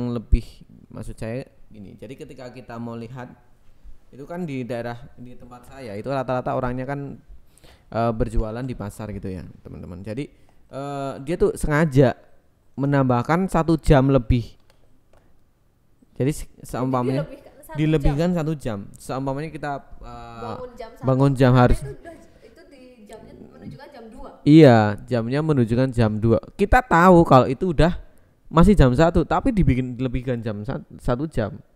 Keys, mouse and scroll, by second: 0.0-3.1 typing, 2.8 click, 4.3 click, 5.2 KP_3, 7.0 r, 7.6 click, 8.3 KP_7, 9.0 r, 9.5 click, 9.8 KP_9, 10.1 KP_0, 11.0 click, 12.3 ctrl+z, 13.5 click, 15.8 r, 16.8 click, 17.0 ctrl+z, 17.2 click, 21.6 click, 22.1 Tab, 22.5 alt+z, 23.2 click, 24.1 click, 25.1 alt+shift+click, 25.7 ctrl+x, 27.1 click, 28.8 alt+shift+click, 29.5 ctrl+x, 30.3 click.